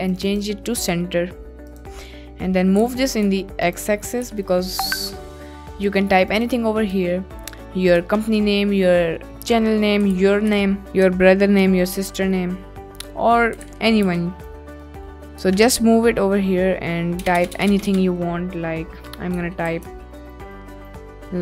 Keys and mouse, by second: 1.6 click, 2.7 g, 3.7 ctrl+click, 4.1 KP_Decimal, 5.2 middle click, 6.2 click, 7.0 Tab, 8.0 Tab, 9.2 click, 10.0 g, 10.1 x, 10.5 Left, 10.8 Return, 11.0 Tab, 11.6 Tab, 12.2 click, 12.6-13.1 drag, 13.6 g, 13.7 x, 14.0 Right, 14.4 Right, 14.9 Left, 15.4 Return, 15.7 Tab, 16.5 middle click, 17.1-18.4 typing, 19.6-20.8 typing, 20.5 Tab.